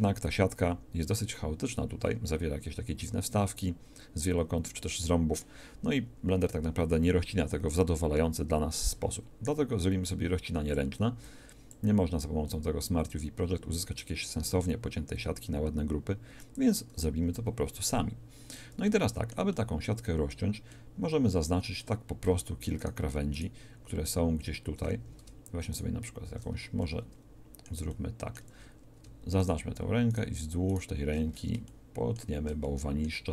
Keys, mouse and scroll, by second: 9.9-14.6 drag, 17.1 middle click, 17.4 a, 20.9 middle click, 25.0 a, 26.5 a, 26.9 click, 29.4 click.